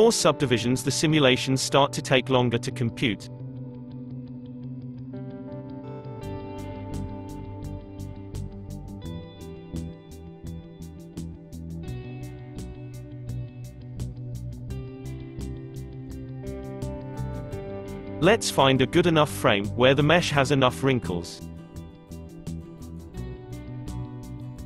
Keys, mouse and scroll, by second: 4.7 space, 6.4-7.7 drag, 7.7-8.8 scroll down 6, 8.8-10.5 drag, 10.5 space, 16.1 space, 16.5-17.5 middle drag, 17.5-20.5 drag, 21.4-22.2 middle drag, 22.8-23.2 right drag, 23.2-24.6 middle drag.